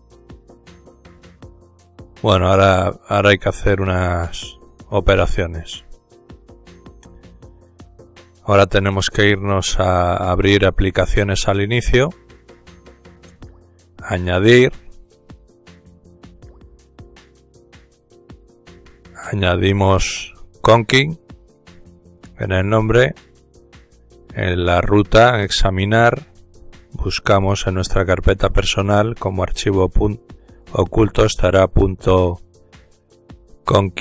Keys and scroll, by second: 19.3-21.2 typing, 21.3 Tab.